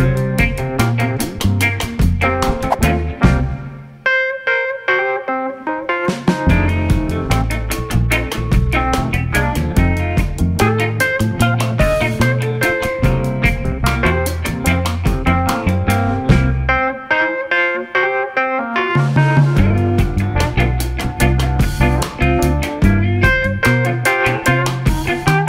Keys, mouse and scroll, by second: 6.7-8.5 middle drag, 8.5 click, 10.1 ctrl+a, 12.0-13.3 drag, 18.3 ctrl+z, 18.9 click, 20.2 h, 21.0 click, 21.4-24.6 middle drag.